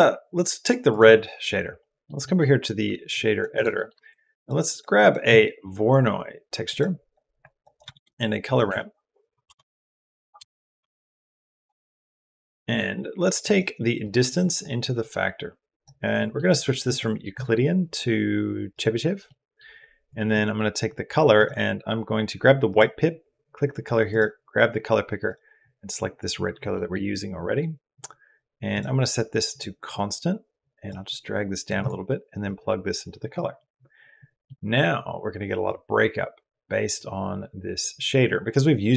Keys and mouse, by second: 0.7 click, 1.6 middle click, 2.1 middle click, 2.9 click, 3.3 click, 3.6 click, 4.0 shift+a, 7.2 click, 7.5 click, 7.7 shift+a, 11.9 click, 14.1 click, 14.8 click, 16.0 click, 16.8-18.6 drag, 19.1 middle click, 19.9 click, 22.6 click, 26.7 middle click, 28.7 click, 30.4 click, 30.9 click, 31.6 click, 32.2 click, 32.5 click, 34.4 click, 35.5-37.9 drag.